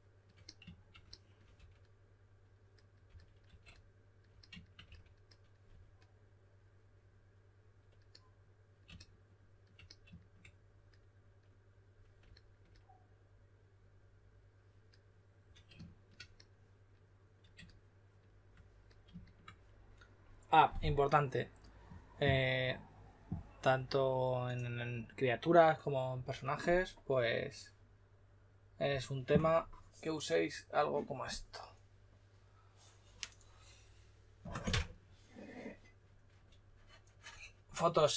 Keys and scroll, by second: 1.5 2, 2.8-6.2 typing, 34.7 6.